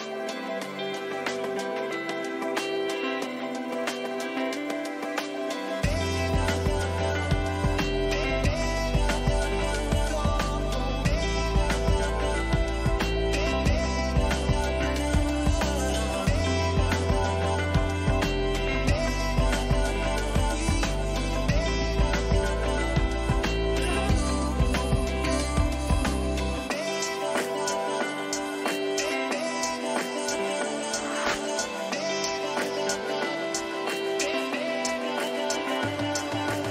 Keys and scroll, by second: 6.3 ctrl++, 16.1 Down, 18.0 ctrl+j, 23.3 Return, 30.4 ctrl+alt+shift+f, 31.5 ctrl+alt+z, 35.0 ctrl+j.